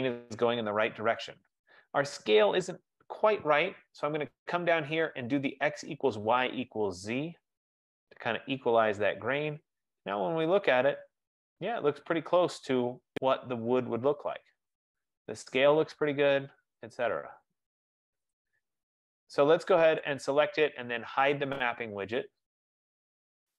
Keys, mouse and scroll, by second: 5.2 click, 7.4-9.1 drag, 9.6-10.1 scroll, 10.6-11.1 scroll, 11.1 middle click, 11.4 middle click, 11.5 middle click, 11.8-12.1 scroll, 15.6-17.1 scroll, 18.6 click, 20.1 click.